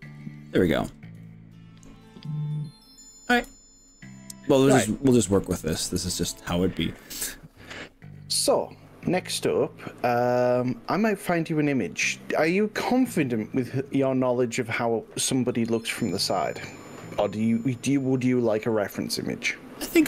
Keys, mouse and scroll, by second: 0.2-0.7 scroll down 4, 1.2-2.3 shift+middle drag, 2.7-3.1 scroll up 3, 2.9 middle click, 3.5-5.4 shift+middle drag.